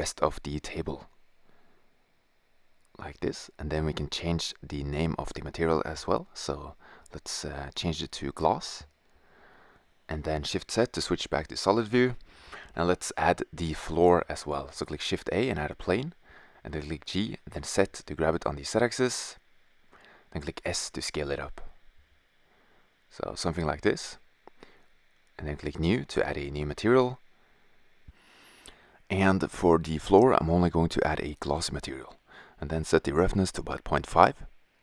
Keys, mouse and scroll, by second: 0.5-2.6 drag, 2.6-4.9 middle drag, 6.5 s, 8.4-11.5 drag, 9.3 shift+z, 14.0 shift+a, 15.4 g, 17.0-18.2 drag, 18.2 g, 19.6 s, 22.6-23.8 middle drag, 28.6-30.6 drag, 33.7 shift+z.